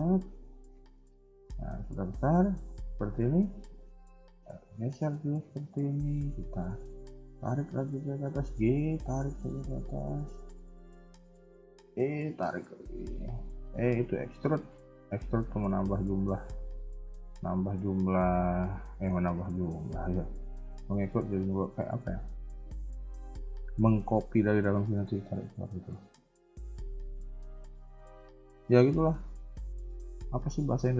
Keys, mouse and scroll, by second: 0.3 middle click, 1.0 KP_1, 1.3 KP_3, 1.5 KP_1, 1.8 KP_3, 3.0 KP_1, 3.6 shift+middle click, 4.4 r, 6.9 g, 11.7 e, 13.9 r, 15.2 s, 16.6 middle click, 19.1 KP_1, 19.4 scroll down 1, 19.6 middle click, 20.1 KP_3, 20.3 KP_1, 28.6 shift+middle click.